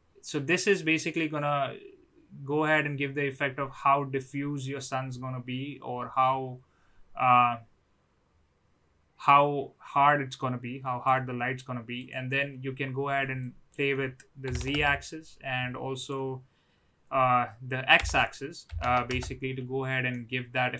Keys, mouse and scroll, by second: 11.9 click, 13.4-15.2 drag, 15.9-19.5 drag, 20.1-20.7 middle drag.